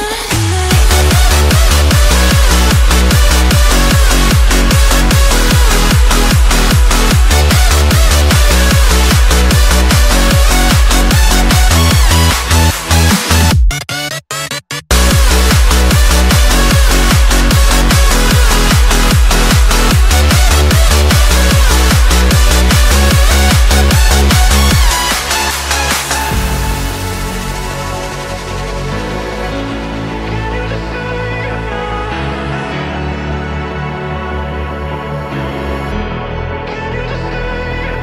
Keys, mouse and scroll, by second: 1.0 middle click, 1.5 Tab, 1.8-2.1 scroll down 3, 2.1 click, 2.7 middle click, 3.1-3.5 scroll up 1, 3.5 click, 3.9 click, 4.3 Tab, 5.0 click, 5.3 l, 7.4 Tab, 7.8 KP_1, 8.2 click, 9.3-9.6 scroll up 1, 9.6 click, 10.2 click, 10.7 shift+middle click, 11.1 Tab, 11.4 click, 12.5 l, 17.0 click, 18.0 l, 21.4 Tab, 21.7 click, 22.2-22.5 scroll down 2, 22.5 middle click, 23.3 click, 23.6 middle click, 24.4 g, 26.2 click, 26.7 KP_1, 27.0 click, 27.6 click, 28.2-29.5 shift+middle drag, 29.5 scroll down 1, 29.6 scroll up 1, 29.8-30.3 shift+middle drag, 30.3-30.7 scroll down 2, 30.7-32.0 middle drag, 32.0 KP_1, 32.6-34.3 shift+middle drag, 34.3 click, 34.7 shift+click, 35.0 shift+click, 35.8 r, 37.6 click.